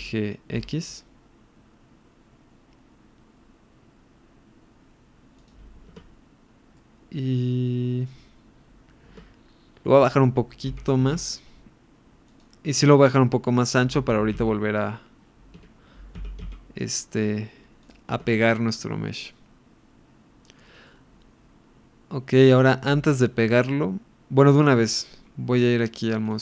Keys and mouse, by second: 0.6 x, 5.9 Tab, 6.8-7.7 middle drag, 7.8 middle click, 9.5 Tab, 10.6 g, 11.0 z, 12.3 click, 13.8 g, 14.4 x, 15.6 Escape, 16.2 s, 16.5 x, 17.8 click, 18.1 Tab, 19.2-20.4 middle drag, 20.8-22.4 middle drag.